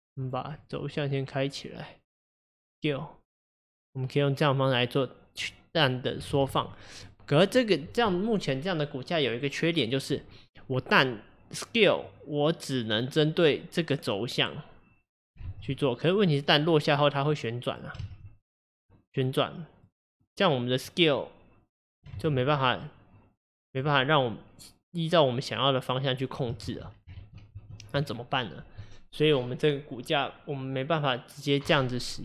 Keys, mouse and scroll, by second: 0.6-3.6 drag, 5.9-6.3 middle drag, 6.3 ctrl+z, 6.7-7.1 scroll down 2, 7.1-10.2 middle drag, 12.0 click, 15.5 ctrl+z, 17.4 click, 18.1 ctrl+z, 18.9 click, 20.9 click, 22.2 ctrl+z, 22.8-25.4 drag, 26.7 ctrl+z, 27.3 ctrl+z, 27.5 ctrl+z.